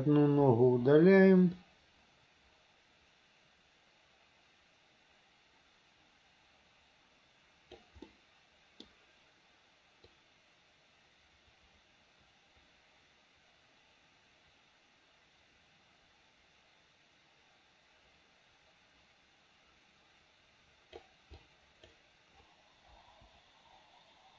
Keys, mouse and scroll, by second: 0.5 Delete, 1.7-7.8 drag, 8.1-8.9 middle drag, 10.2-21.1 drag, 21.4-21.9 drag, 23.0 Delete.